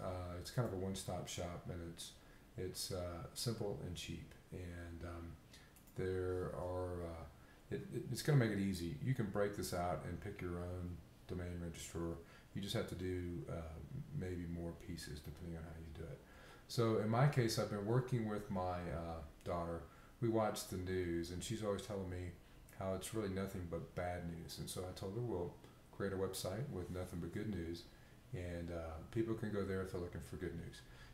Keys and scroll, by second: 16.2 b.